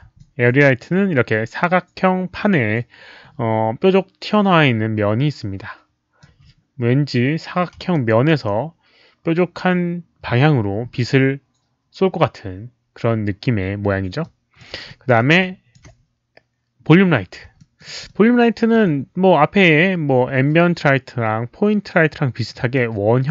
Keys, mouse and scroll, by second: 0.1-6.2 alt+drag, 7.9 alt+click, 14.2-14.6 alt+drag, 14.8 alt+drag, 15.4-15.7 alt+drag, 17.5 alt+middle click, 18.0 alt+click, 22.7-23.3 alt+drag.